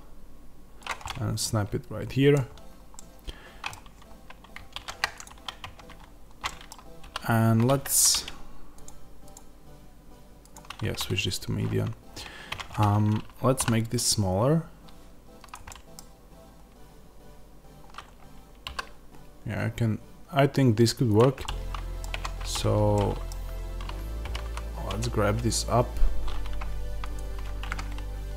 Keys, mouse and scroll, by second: 0.9-5.1 middle drag, 2.4-2.8 scroll up 1, 4.6 shift+Tab, 5.1 click, 5.5 Tab, 5.9 scroll down 1, 6.3-8.7 middle drag, 6.9 s, 7.7 Escape, 8.7 click, 12.4 Tab, 12.4-15.4 drag, 13.5 s, 15.6-21.0 middle drag, 15.9 scroll down 1, 17.9 scroll up 1, 18.6 s, 21.0 click, 21.3-22.4 middle drag, 22.0 Tab, 22.4 click, 22.9-27.0 middle drag, 23.2 scroll down 1, 24.1 g, 27.0 click.